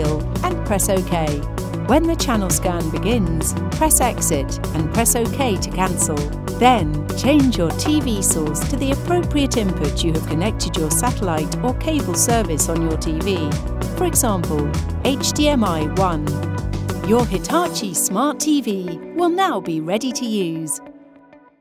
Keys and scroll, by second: 0.0 Down, 0.5 Down, 1.0 Return, 1.6 Escape, 4.2 Left, 5.2 Return.